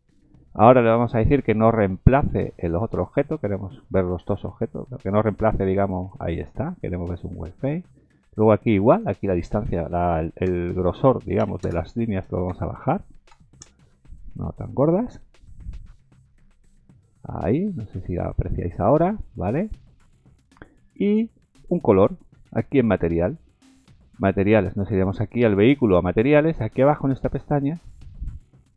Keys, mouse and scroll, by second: 5.5 click, 8.9 click, 17.1-18.0 scroll up 3, 20.1-20.6 scroll down 3, 27.7 click.